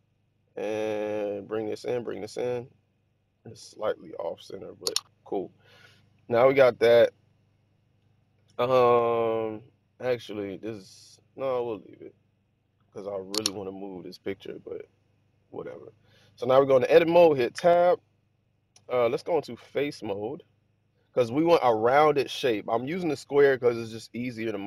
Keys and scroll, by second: 17.5 Tab.